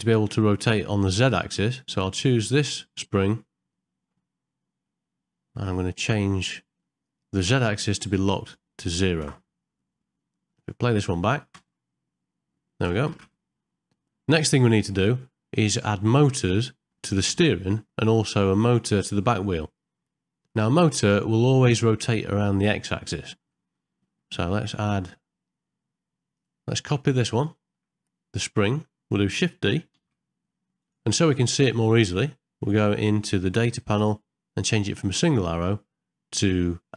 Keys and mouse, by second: 2.6 click, 4.8-6.9 middle drag, 8.2-9.3 drag, 10.5 ctrl+middle click, 10.9 middle click, 11.6 space, 13.2 shift+Left, 14.6 middle click, 15.3 shift+middle click, 16.7 middle click, 18.2 middle click, 20.6 shift+middle click, 23.1 middle click, 23.8 shift+middle click, 24.6 ctrl+middle click, 26.3 click, 27.2 ctrl+middle click, 27.6 shift+middle click, 30.0 shift+d, 35.3-36.9 drag.